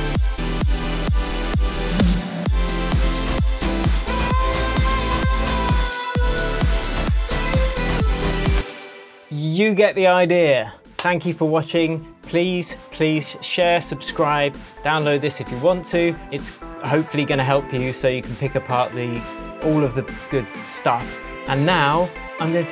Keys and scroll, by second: 8.5 space, 8.8 super+s.